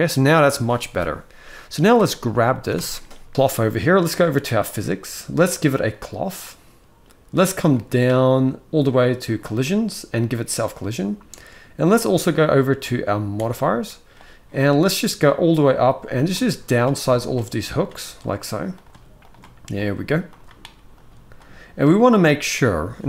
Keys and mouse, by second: 1.7 click, 2.3 ctrl+s, 2.5 ctrl+s, 4.5 click, 5.7 click, 9.0 click, 10.3 click, 15.9 click, 16.4 click, 16.9 click, 17.4 click, 17.9 click, 18.5 click, 18.9 click, 19.5 click, 20.0 click, 20.7 click.